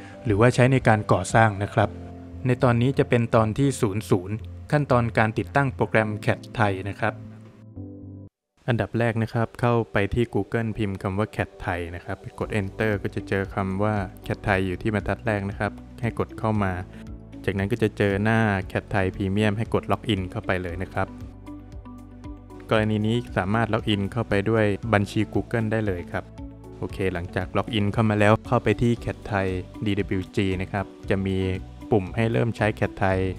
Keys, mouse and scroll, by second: 0.0 click, 0.3 Return, 1.5 middle click, 4.3 click, 6.1 click, 7.3 space, 7.9 click.